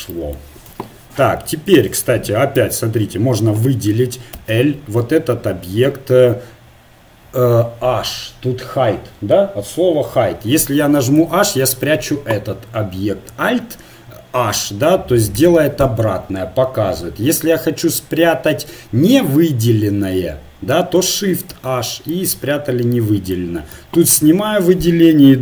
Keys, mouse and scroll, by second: 0.7 z, 2.5 a, 4.3 l, 4.4 o, 11.2 h, 15.4 alt+h, 21.5 shift+h, 22.2-23.8 middle drag, 23.8 a.